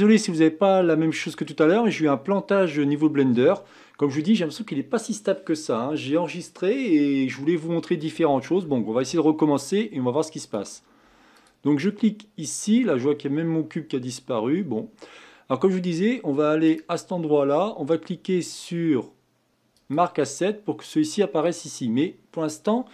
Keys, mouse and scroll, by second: 0.2-2.5 middle drag, 2.5-3.0 scroll down 1, 3.0 scroll up 2, 10.4 click, 11.3 click, 11.9-14.9 middle drag, 16.6-19.8 right drag.